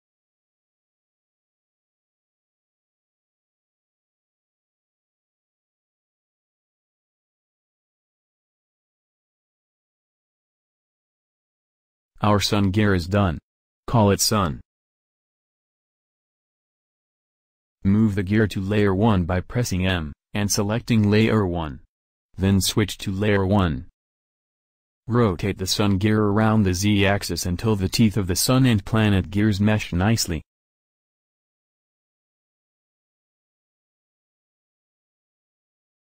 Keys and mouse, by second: 1.8 a, 2.0 a, 2.7 w, 4.7 e, 7.7 a, 7.8 a, 8.4 ctrl+n, 9.7 Tab, 10.3 KP_1, 11.1 KP_7, 18.8 m, 23.3-24.9 drag, 25.8 r, 28.7 r, 32.3 r.